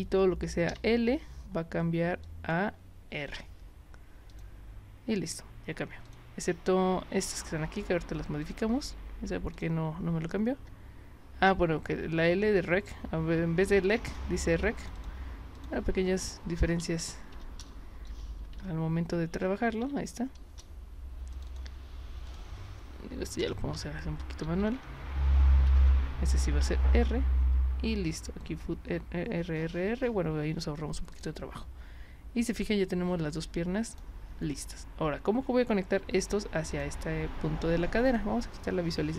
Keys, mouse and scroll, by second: 0.7 l, 2.2 click, 3.1 r, 4.3 click, 6.1 click, 8.4 click, 9.5 shift+click, 14.1 click, 14.8 click, 14.9 click, 15.5 click, 17.3 l, 19.8 r, 21.3 click, 21.5 click, 22.3 click, 23.4 BackSpace, 23.7 l, 26.6 r, 26.9 Return, 31.1 click, 33.9 click, 36.7 click, 38.1 click.